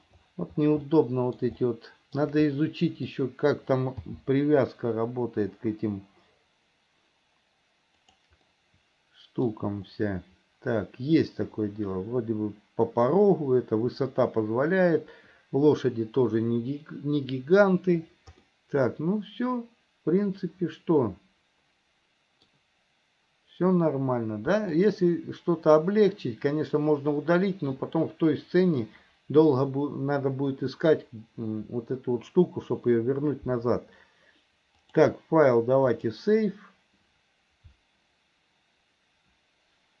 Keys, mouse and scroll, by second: 1.1 middle click, 1.9 shift+middle click, 2.7 middle click, 4.2 g, 8.7 click, 8.7 middle click, 18.7-22.7 middle drag, 24.9 click, 34.9-40.0 drag.